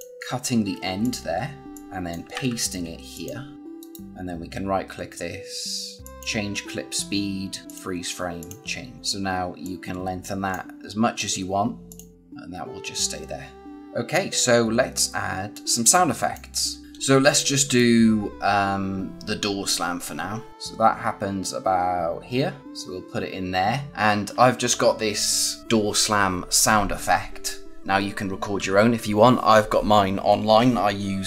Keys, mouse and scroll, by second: 0.6 a, 0.9 click, 2.2 ctrl+v, 3.0 click, 3.7 right click, 6.0 click, 13.8 click, 17.7 click.